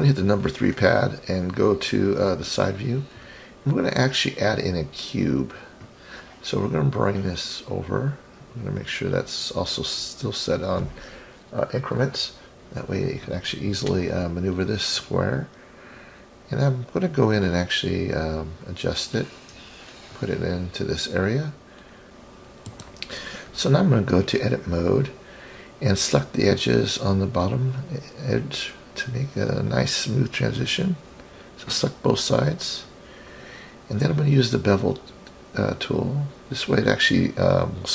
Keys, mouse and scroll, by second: 1.4-3.6 drag, 5.4-7.1 drag, 7.8-13.4 drag, 16.2-18.0 drag, 18.0 ctrl+z, 20.5 click, 21.0-21.5 middle drag, 21.8-22.1 scroll up 4, 22.7 click, 24.4-25.1 drag, 25.5 click, 26.5 click, 28.0-28.6 middle drag, 31.1 shift+click, 31.8-33.2 middle drag, 34.0-35.4 drag, 35.8-36.7 middle drag, 36.8-37.3 scroll down 3.